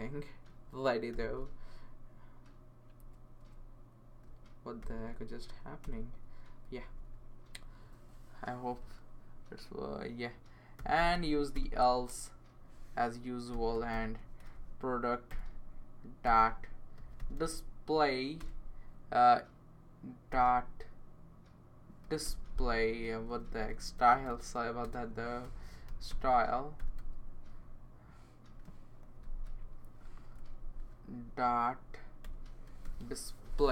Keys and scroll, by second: 0.5 Right, 1.1 ;, 3.0 BackSpace, 3.4 BackSpace, 4.8 ;, 5.3 Right, 5.8 Return, 6.6 Right, 6.9 Right, 7.0 Right, 10.5-11.6 typing, 13.2-14.4 typing, 14.8 Down, 14.9 Down, 15.3 Return, 16.0-17.8 typing, 18.4 Return, 20.3 typing, 21.8-23.6 typing, 26.1-27.3 typing, 29.0 Left, 30.1-30.6 typing, 30.4 Right, 31.5 Right, 32.0-33.5 typing.